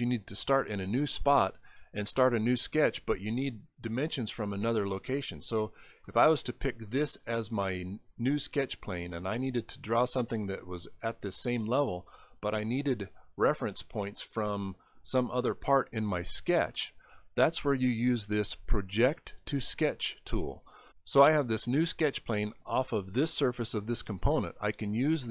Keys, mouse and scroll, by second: 2.5 click, 4.9 click, 6.1 middle click, 9.7 middle click, 9.9 middle click.